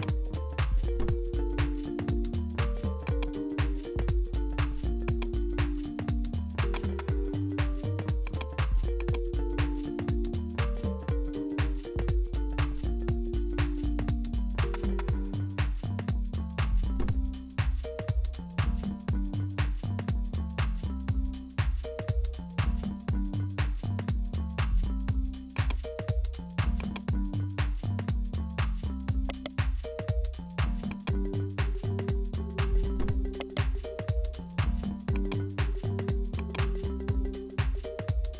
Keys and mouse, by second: 3.1 click, 5.4 click, 6.8 click, 8.3-10.6 drag, 25.8 click, 26.8 click, 29.3 right click, 30.9 click, 33.4 right click, 35.2-38.3 drag.